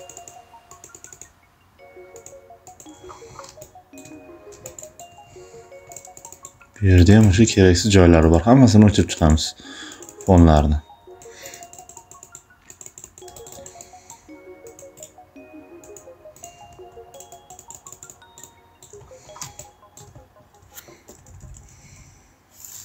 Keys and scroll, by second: 3.3 space, 6.9 shift+space, 13.1 space, 19.3 space.